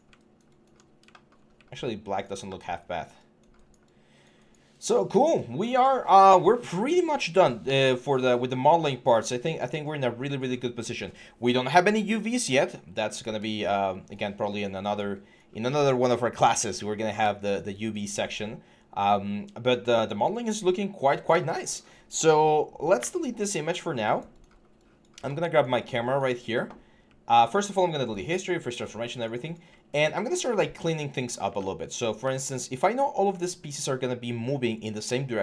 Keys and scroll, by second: 22.8 Delete.